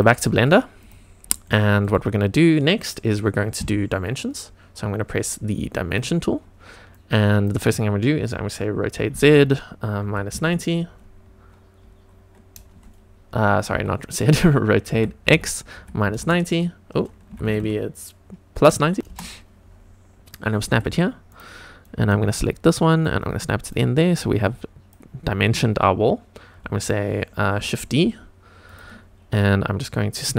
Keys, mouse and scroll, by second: 0.7 click, 1.4-1.8 shift+middle drag, 5.9 click, 6.9 click, 8.9 r, 9.1 z, 10.2 KP_Subtract, 10.2 KP_9, 10.4 KP_0, 13.7 Escape, 14.9 r, 15.2 x, 15.7 KP_Subtract, 16.0 KP_9, 16.1 KP_0, 17.2 Left, 17.4 Left, 18.2 Left, 18.6 KP_Subtract, 19.1 Return, 20.7 g, 21.3 click, 21.9 click, 23.1 click, 24.5 click, 27.6 shift+d, 28.7 click, 29.3-30.3 scroll up 1.